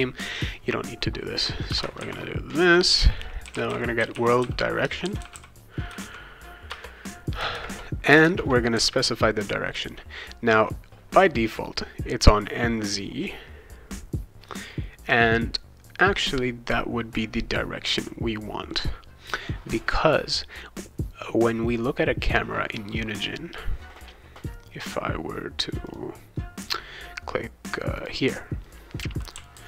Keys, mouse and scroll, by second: 1.7 -, 1.9 shift+., 3.1-6.5 typing, 6.7 Return, 7.5 shift+9, 8.2 shift+0, 25.9 click, 28.0 click, 28.6-29.6 right drag, 29.1-29.6 typing.